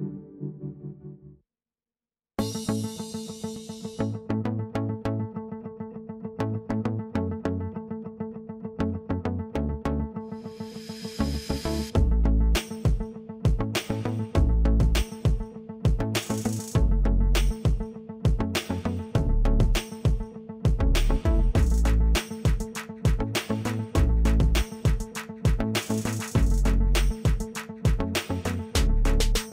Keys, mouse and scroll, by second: 12.4-15.8 scroll down 1, 15.8-29.5 drag.